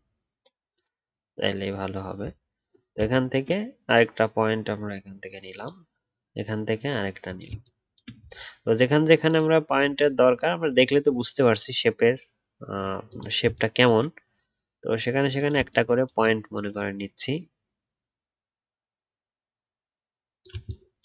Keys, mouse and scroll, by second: 2.3 alt+scroll up 1.